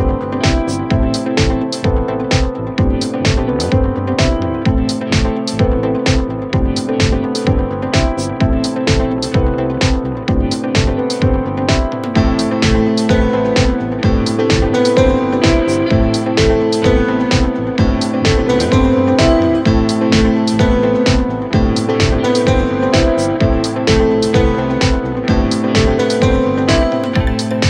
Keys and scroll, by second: 1.2 ctrl+z, 5.5 2, 7.6 f, 13.5 ctrl+d, 13.8 Escape, 15.9 Delete, 16.4 ], 18.9 g, 19.0 l, 19.4 Return, 23.7 4, 25.0 3, 26.0 shift+g, 26.4 shift+f.